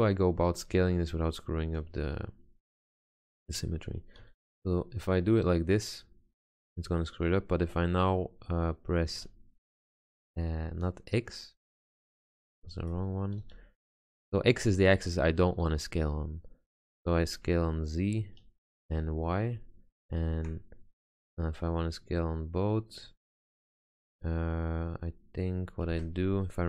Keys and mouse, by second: 4.4 s, 12.5 ctrl+z, 13.5 s, 26.0 ctrl+z.